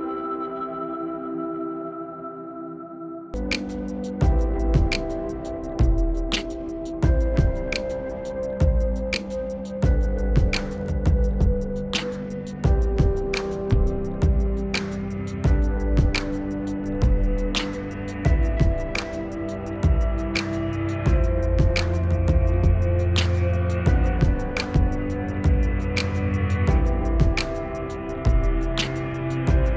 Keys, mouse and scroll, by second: 3.4-4.5 drag, 7.9-12.3 drag, 12.3 right click, 13.2 click, 14.2-18.9 drag, 18.9-24.1 ctrl+drag, 24.1 ctrl+z, 24.5 click, 25.6 ctrl+right click, 26.2-27.5 drag, 27.5-29.7 drag.